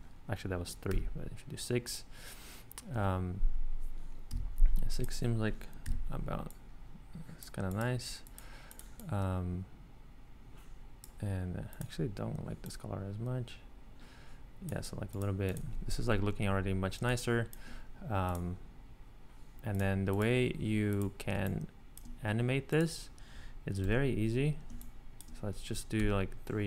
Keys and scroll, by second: 0.9 6, 2.9 8, 4.3 6, 5.8 6, 17.0 space, 21.4 space, 23.8 super+d, 24.7 space, 26.0 super+d.